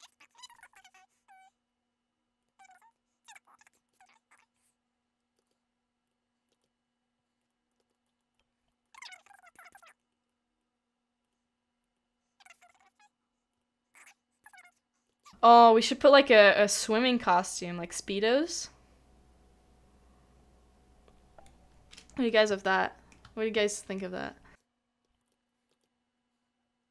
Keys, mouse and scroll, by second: 3.7 shift+middle click, 5.4 shift+middle click, 5.5 shift+click, 6.6 shift+middle click, 7.5 middle click, 7.9 shift+middle click, 8.0 scroll down 1, 8.2 middle click, 15.0 middle click, 15.1 shift+middle click, 22.7 shift+middle click, 25.2 shift+middle click, 25.7 shift+middle click.